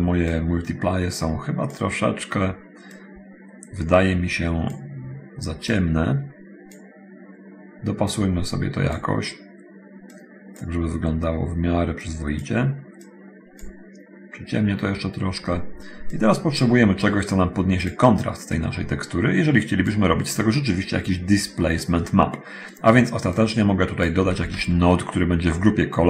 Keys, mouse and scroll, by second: 0.2-1.9 drag, 3.0-5.0 drag, 5.9-7.1 drag, 8.3 click, 10.3 click, 12.0-12.8 drag, 13.2 click, 16.3 click, 18.8-20.2 drag, 23.6 click, 24.5 shift+a.